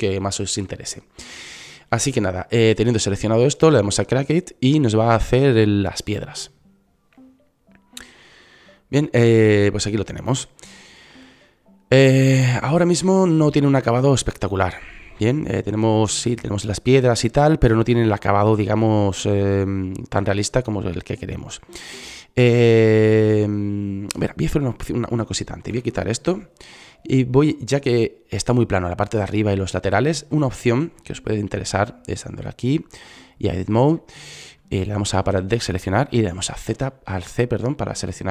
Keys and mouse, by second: 5.7-7.3 drag, 10.9-11.9 drag, 12.8-20.7 drag, 21.9-23.6 drag, 24.8 Delete, 26.1-29.4 drag, 29.9-31.1 drag, 34.3 a, 36.0 c.